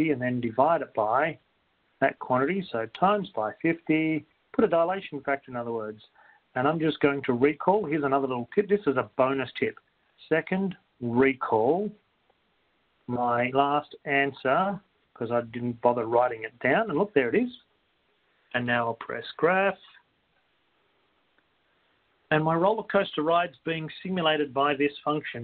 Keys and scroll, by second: 3.8-5.4 typing, 9.8-10.9 typing, 16.3-17.0 typing.